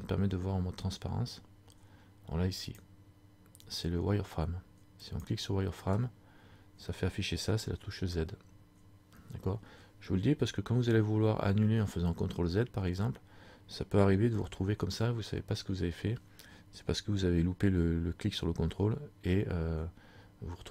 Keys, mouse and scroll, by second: 2.8 click, 8.2 z, 10.9 z, 11.6 z, 14.6 z.